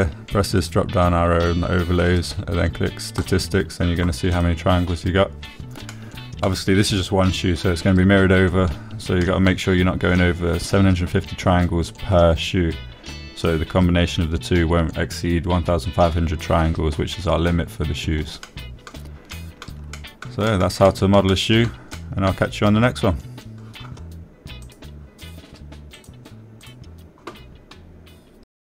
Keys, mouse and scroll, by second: 0.9 middle drag, 3.3-6.4 drag, 7.0 click, 8.6-9.1 middle drag, 11.9 middle drag, 21.2-21.6 middle drag, 22.0 middle drag, 22.7 middle drag, 23.2 shift+middle click, 23.6 middle drag, 24.0-24.3 middle drag, 24.7 drag.